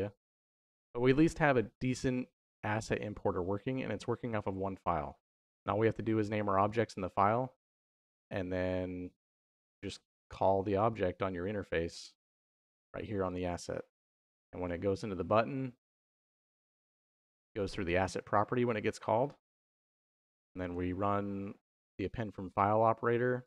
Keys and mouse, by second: 0.3 middle click, 1.7-2.7 drag, 4.6-7.5 drag, 8.4 middle click, 10.6 middle click, 12.3 click, 13.8 middle click, 14.5 middle click, 15.2 middle click, 16.4 middle click, 19.0 click, 20.5 click, 23.3 click.